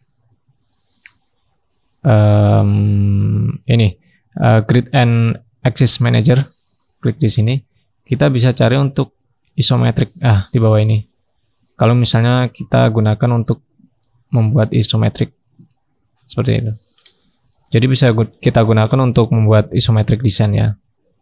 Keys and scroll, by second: 16.6-18.6 scroll down 1.